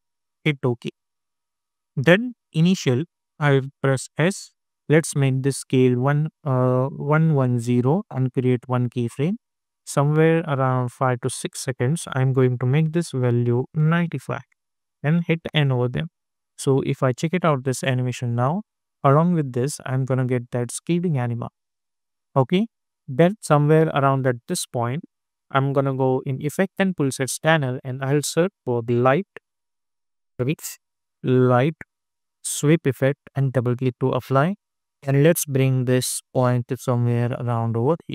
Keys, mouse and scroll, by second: 0.0-0.3 typing, 0.8 Return, 2.7 click, 4.0 s, 5.1 click, 7.7 Return, 8.5-13.4 drag, 14.5 Return, 15.4 n, 15.9 space, 21.7 space, 22.9-26.7 drag, 27.3 ctrl+a, 28.2-29.3 typing, 30.4-32.2 typing, 33.2-38.1 drag.